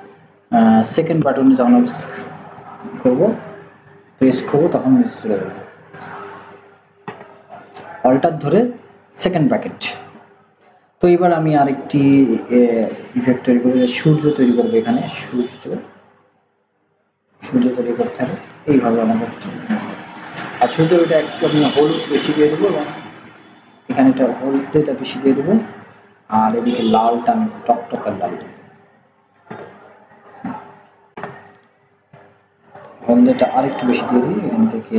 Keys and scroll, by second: 1.0 ctrl+[.